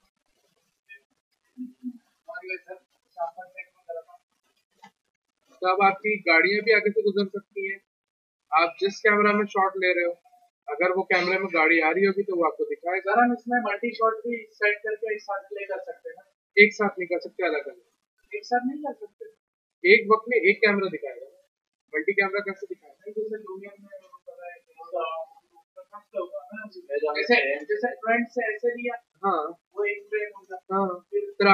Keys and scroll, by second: 8.8 c, 16.4 q.